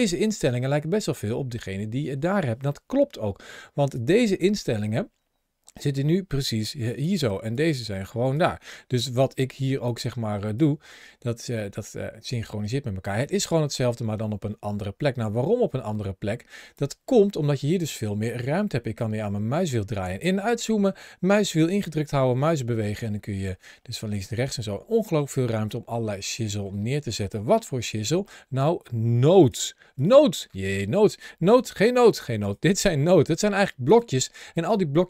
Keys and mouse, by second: 3.6 ctrl+shift+a, 21.6-24.2 middle drag, 26.4 middle click, 27.1 middle click, 28.2 middle click, 29.8 click, 31.4 g, 32.6 g, 34.4 click, 34.5 g.